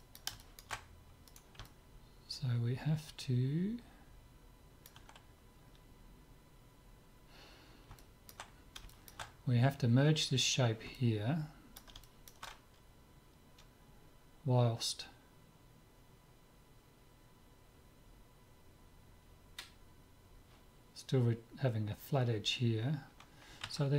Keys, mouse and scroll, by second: 1.6-3.3 drag, 8.0-14.0 middle drag, 23.1 middle click.